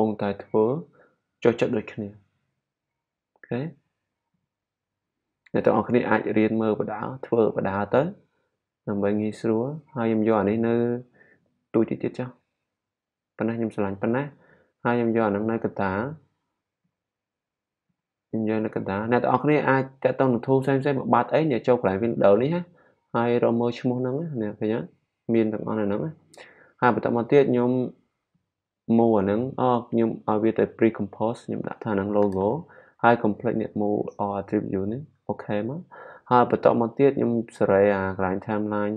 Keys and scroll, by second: 31.8-32.8 typing.